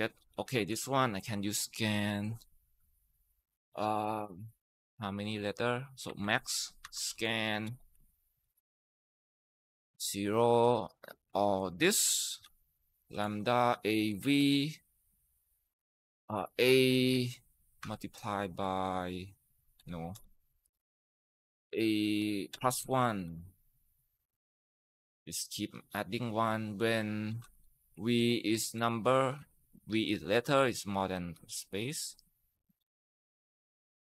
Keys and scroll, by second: 0.4 =, 5.6-9.8 typing, 11.4 ctrl+shift+Right, 11.8 ctrl+shift+Down, 12.0-14.5 typing, 15.9-17.6 typing, 19.6-20.7 typing, 22.1-24.5 typing, 25.7-32.3 typing, 33.9 Tab.